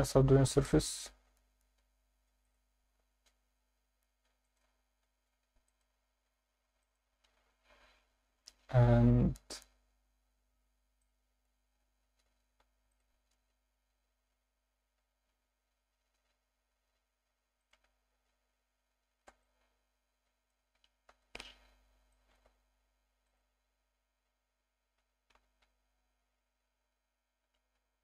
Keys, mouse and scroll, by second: 1.4 Tab, 1.8 Tab, 2.3 ctrl+r, 4.4 click, 5.0 ctrl+r, 6.8 click, 7.2 Tab, 8.3 Tab, 9.7 Tab, 10.5 Tab, 11.0 middle click, 11.7-12.3 scroll up 1, 12.3 scroll up 1, 12.6 ctrl+r, 17.6 shift+click, 18.2 Tab, 18.2-19.1 scroll down 2, 19.2 alt+a, 19.4-20.5 alt+middle drag, 21.1 KP_7, 22.1 alt+shift+middle drag, 23.3 click, 25.0 g, 25.3 x.